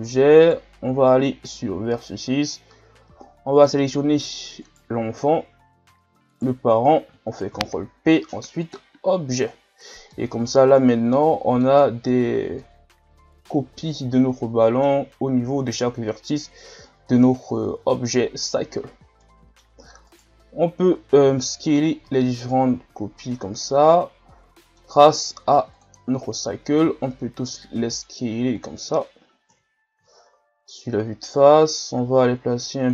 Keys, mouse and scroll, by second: 0.0 right click, 0.5 right click, 2.0-3.3 drag, 3.3-4.6 scroll up 1, 4.6 right click, 6.4 shift+right click, 7.5 ctrl+p, 9.6 scroll down 2, 10.1-11.8 middle drag, 11.8 scroll up 2, 12.6-15.6 middle drag, 19.2-20.1 middle drag, 20.1 right click, 21.2 s, 23.6-25.7 middle drag, 25.7 click, 26.6 s, 29.5 KP_1, 30.1-30.8 shift+scroll up 5, 31.4-32.9 drag.